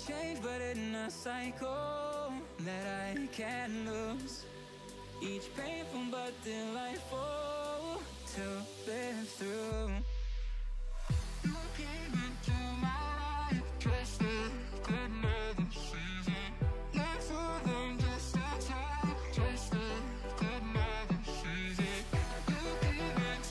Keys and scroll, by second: 1.8 ctrl+z, 12.5 ctrl+=.